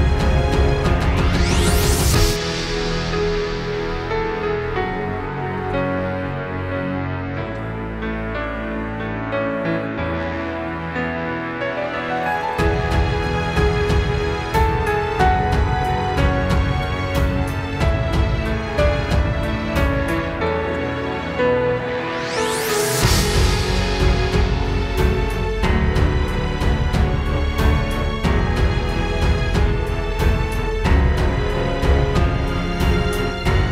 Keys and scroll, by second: 13.1 super+[, 14.4 super+], 15.4 space, 16.1 super+space, 16.9 super+space, 17.1 super+space, 17.9 space, 18.1 space, 18.7 super+space, 23.3 space, 24.5 space, 30.7 super+z.